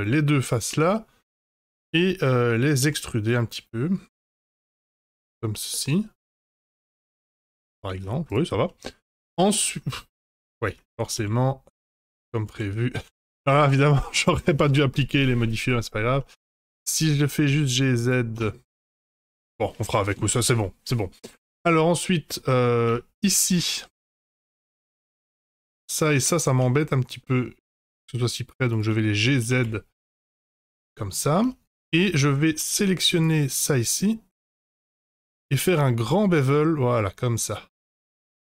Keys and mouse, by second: 0.5 shift+click, 0.9 middle click, 2.8 e, 5.4 Tab, 5.7-7.0 middle drag, 7.5 Tab, 8.2 Tab, 8.6-9.0 middle drag, 9.8-10.2 middle drag, 10.6 Tab, 11.3 ctrl+z, 12.0 ctrl+z, 12.5 ctrl+z, 13.2 ctrl+z, 14.0 ctrl+z, 14.5 ctrl+z, 15.4 middle click, 16.1 middle click, 16.4 g, 18.6 Tab, 19.7 middle click, 20.6-21.0 middle drag, 22.0-22.3 shift+middle drag, 22.5 middle drag, 22.9 Tab, 23.5 2, 24.5 middle click, 25.4 click, 26.3 shift+click, 26.7 middle click, 27.9 shift+click, 28.7 shift+click, 29.0 middle click, 29.3 g, 31.6 Tab, 32.0 Tab, 32.5 2, 33.2 shift+click, 35.0 middle click, 35.6 ctrl+b.